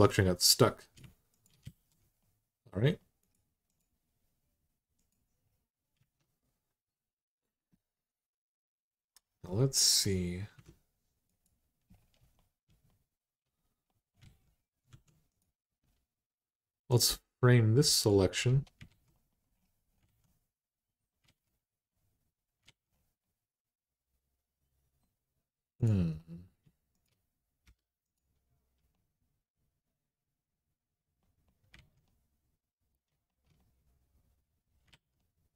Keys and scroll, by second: 1.4 alt+z, 5.8 Tab, 10.3 `, 14.0 alt+z, 14.7 1, 18.7 alt+z, 19.8 alt+z, 21.0 alt+z, 22.4 alt+z, 27.4 m, 31.5 alt+z, 34.7 alt+z.